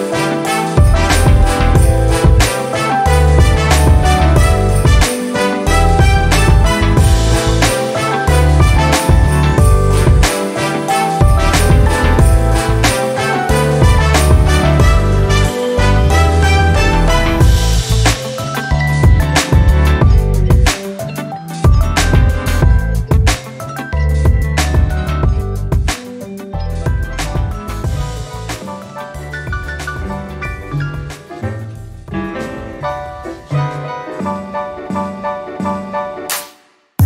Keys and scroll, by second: 4.5 j.